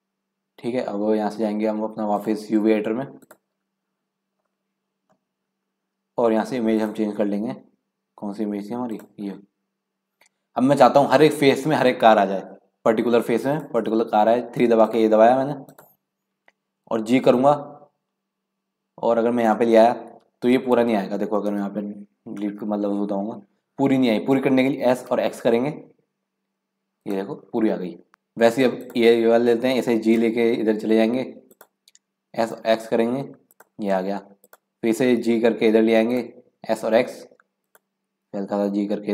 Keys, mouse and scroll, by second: 2.2-4.3 drag, 4.3-4.7 scroll up 1, 4.7 middle click, 4.9 scroll down 1, 5.1-6.7 scroll up 3, 6.7-9.8 drag, 13.5 click, 14.7 3, 14.8 click, 15.7 click, 17.3 g, 21.6 KP_Decimal, 22.1 scroll down 3, 22.4 middle click, 23.0-23.7 scroll up 1, 24.9 s, 27.4 scroll down 2, 27.6 scroll up 1, 27.7-28.8 middle drag, 28.8 click, 30.2 g, 32.3 s, 34.4 click, 35.2 g, 36.1 click, 36.7 s, 38.2 g.